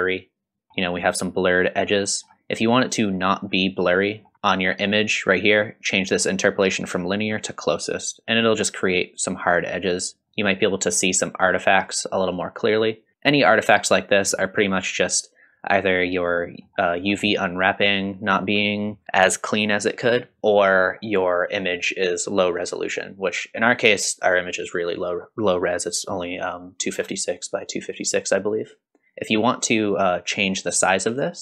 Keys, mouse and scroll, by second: 0.7 shift+middle click, 0.7 scroll down 2, 1.7-2.1 scroll down 2, 2.1-2.4 scroll up 2, 4.1 scroll up 2, 4.3 middle click, 6.7-8.2 drag, 9.7-10.2 scroll up 2, 10.2-10.5 scroll down 2, 10.5 middle click, 14.6-15.0 scroll down 2, 16.3 middle click, 17.0-17.3 scroll down 2, 17.3-18.0 middle drag, 20.7-22.3 scroll up 5, 23.0-23.9 scroll up 1, 26.4-28.0 scroll down 3, 28.0-29.6 drag, 28.0-29.0 scroll down 1, 31.1-31.4 drag.